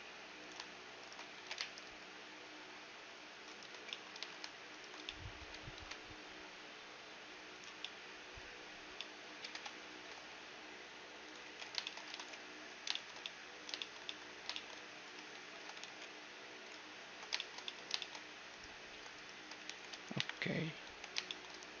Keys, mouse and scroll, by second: 1.0-2.9 right drag, 1.4 ctrl+b, 3.9-7.5 middle drag, 4.9-7.5 right drag, 5.7 ctrl+b, 7.8-11.2 middle drag, 9.4 Tab, 9.9 ctrl+3, 10.2 t, 11.2-13.3 drag, 11.4 t, 11.6-15.3 middle drag, 11.8-13.3 right drag, 12.1 ctrl+s, 15.1 right click, 15.3 ctrl+3, 15.3 ctrl+2, 15.8 t, 16.3 right click, 16.9 click, 17.0 ctrl+2, 18.4 middle click, 19.0-21.1 drag, 19.6 t, 20.1 KP_1, 20.8 ctrl+2, 21.2-21.8 middle drag.